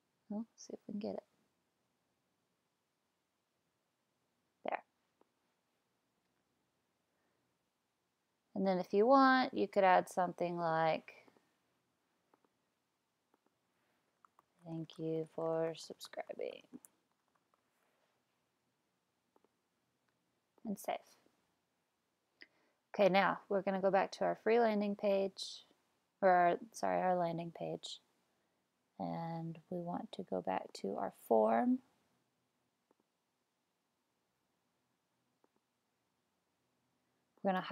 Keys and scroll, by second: 13.7-18.2 typing.